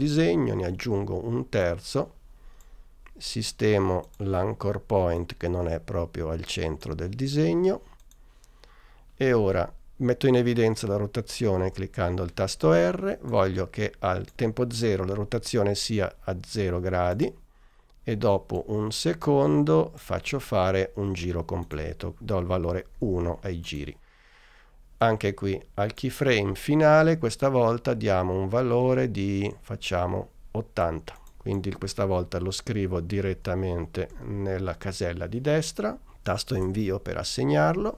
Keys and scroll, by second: 0.0 BackSpace, 11.7 r, 23.0 l, 33.3 8, 34.2 0, 36.7 Return.